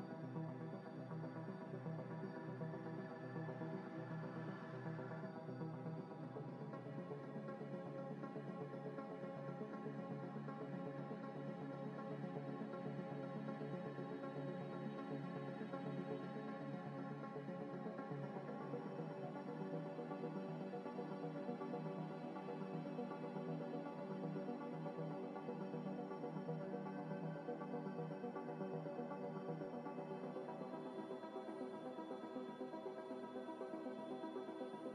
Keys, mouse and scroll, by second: 0.0-2.4 typing, 3.5 Tab, 4.2 s, 4.9 Tab, 6.1 z, 6.5 Tab, 6.7 a, 7.4 u, 8.0 scroll down 1, 9.3 a, 9.5 g, 9.7 y, 10.0 x, 10.5 scroll up 1, 13.0 s, 13.0 y, 14.3 s, 15.0 g, 16.2 s, 16.3 y, 17.5 s, 17.6 y, 18.5 s, 18.9 Tab, 20.0 Tab, 20.2 a, 20.6 u, 21.6 scroll down 1, 22.1 a, 22.8 s, 22.9 y, 24.0 s, 24.1 g, 24.3 y, 24.9 x, 25.7 scroll up 1, 27.1 g, 28.6-31.7 typing, 33.0 Tab, 34.2 Tab, 34.2 Tab, 34.5 a.